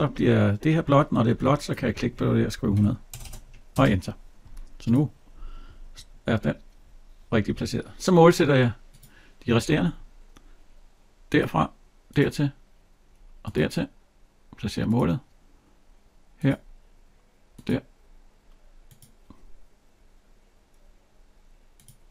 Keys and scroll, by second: 3.6 Return.